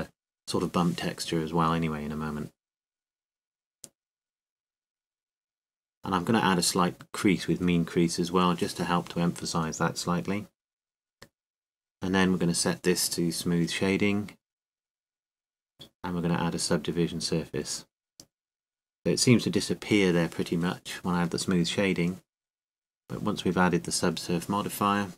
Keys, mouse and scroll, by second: 0.4-3.9 middle drag, 4.9 n, 7.2-9.0 drag, 9.6 Tab, 16.7-18.7 drag, 18.8 t, 20.0-21.2 drag, 21.2-24.4 middle drag, 22.9 Tab, 23.5 Tab.